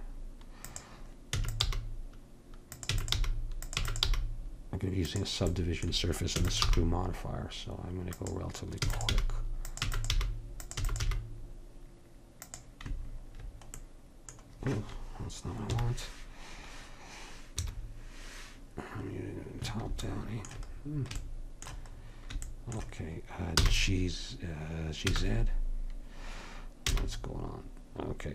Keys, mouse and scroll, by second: 1.4 e, 1.7 g, 2.9 e, 3.2 g, 3.8 e, 4.1 g, 6.4 e, 6.7 g, 8.8-11.1 typing, 15.7 KP_1, 17.6 KP_7, 23.6 g.